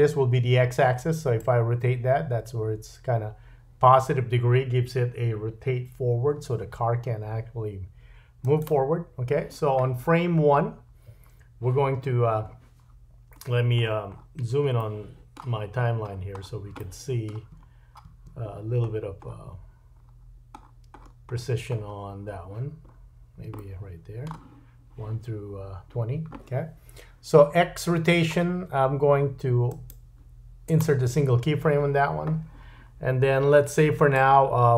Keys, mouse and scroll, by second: 1.4-8.7 drag, 8.7-29.6 middle drag, 13.4-13.8 scroll down 3, 13.8-14.6 scroll up 4, 15.6-16.7 scroll up 7, 17.6-18.0 scroll up 2, 18.5-18.8 scroll down 2, 18.8-20.0 scroll up 5, 20.0-20.5 scroll down 3, 20.5-22.3 scroll up 8, 22.8-23.4 scroll down 3, 29.6-34.2 right drag, 34.2-34.7 drag.